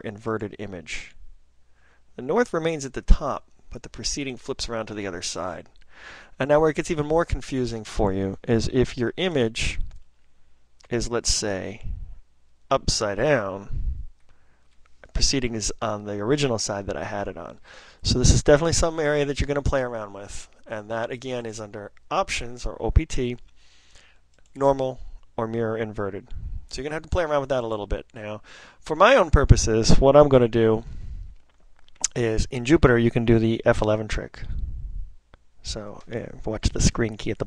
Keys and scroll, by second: 9.9 ctrl+n, 10.4 ctrl+n, 10.5 ctrl+n, 10.6 ctrl+n, 31.4 ctrl+p, 31.9 ctrl+p, 32.0 ctrl+p, 32.0 ctrl+p, 32.1 ctrl+p.